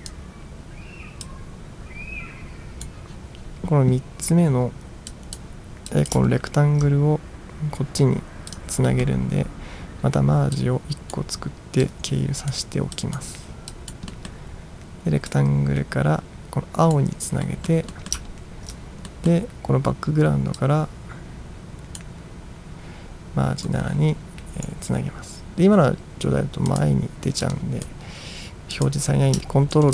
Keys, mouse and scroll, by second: 0.0 click, 1.3-2.9 drag, 5.1-5.4 drag, 6.0 click, 6.4-7.2 ctrl+scroll up 1, 7.2-7.9 ctrl+scroll up 1, 8.6 click, 9.0 middle click, 10.6-11.2 drag, 11.9-12.6 drag, 13.0 drag, 13.8 drag, 14.2 middle drag, 15.4-17.0 drag, 17.5 middle drag, 18.0 middle drag, 18.4 ctrl+scroll down 1, 19.2 middle drag, 20.6-22.1 drag, 23.7 right click, 26.8 click, 27.5 click, 28.9 click.